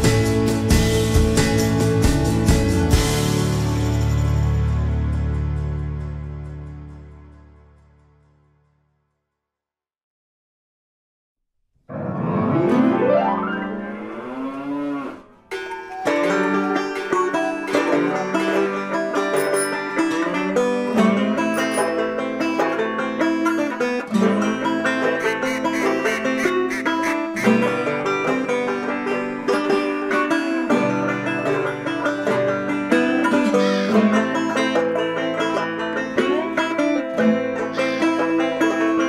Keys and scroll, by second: 7.7 ctrl+t, 14.8 Return, 26.3 Down.